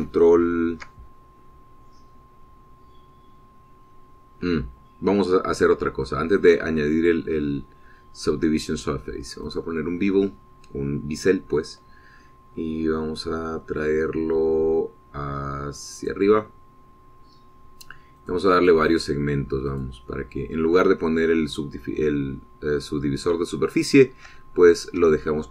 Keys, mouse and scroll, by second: 7.2 click, 7.8 click, 10.3 click, 16.8 click, 19.1 click, 20.5 click, 23.3 scroll down 2, 23.8 scroll up 2, 24.7-25.5 shift+drag.